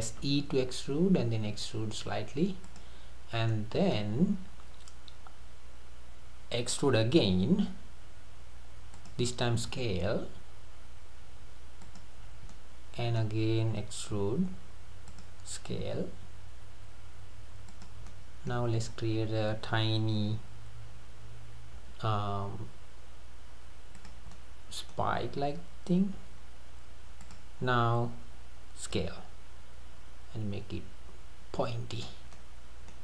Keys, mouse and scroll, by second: 0.3 e, 3.6-6.7 middle drag, 7.7 e, 9.7 s, 12.3 scroll down 2, 12.5-14.1 middle drag, 14.1 e, 15.8 s, 18.1-18.7 middle drag, 18.7-19.0 scroll up 5, 21.8 i, 24.3-26.2 middle drag, 26.2 e, 29.0 s, 32.3 scroll up 1, 32.3-33.0 middle drag.